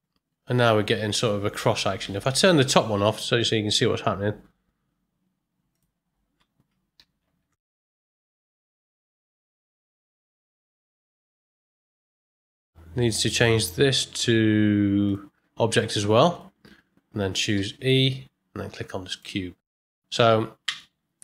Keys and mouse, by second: 2.0 space, 5.7 click, 7.4 shift+Left, 7.8 space, 12.2 space, 15.0-16.3 drag, 17.5 e, 20.2 shift+Left, 20.6 space.